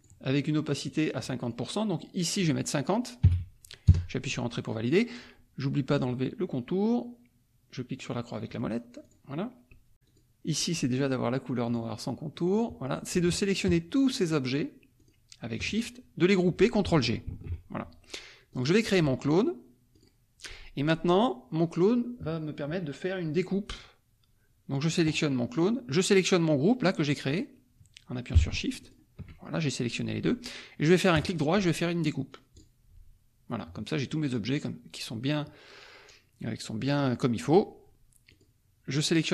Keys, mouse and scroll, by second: 0.0 click, 0.8 click, 3.8 KP_Enter, 3.8-6.5 drag, 8.5 middle click, 9.0 click, 10.0 click, 11.7 click, 13.5 shift+click, 14.2 shift+click, 14.9 shift+click, 17.3 ctrl+g, 18.5 click, 19.9 click, 28.9 shift+click, 31.1 right click, 32.5 click, 38.2 click.